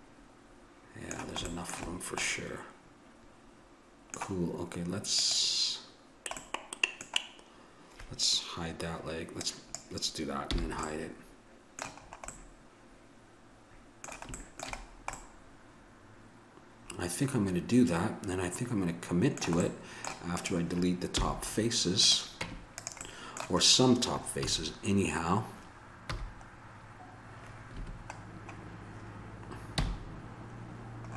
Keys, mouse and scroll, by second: 1.5 middle click, 5.2-6.4 drag, 6.4-9.4 middle drag, 9.4-10.8 drag, 10.5 h, 10.8 middle click, 14.6-17.1 middle drag, 20.4-23.6 drag, 21.1 h, 22.4 Tab, 24.4 a, 26.1 c, 28.2-31.1 middle drag, 29.7 c.